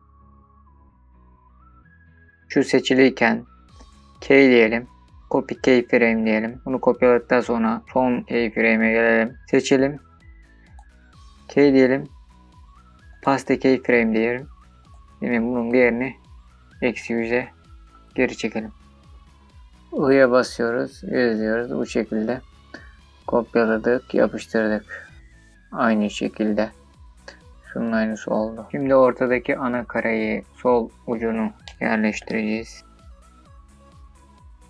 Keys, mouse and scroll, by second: 2.2-3.0 drag, 4.0-6.4 drag, 6.4-7.4 scroll down 4, 7.4-15.4 drag, 16.0-19.1 drag, 18.6 KP_0, 30.3-32.8 drag, 32.8-33.8 scroll up 17, 33.0 shift+middle click, 33.2 middle click, 33.4 shift+middle click, 33.6 shift+middle click, 33.8 middle click, 33.9 r, 34.4 click, 34.5 shift+middle drag.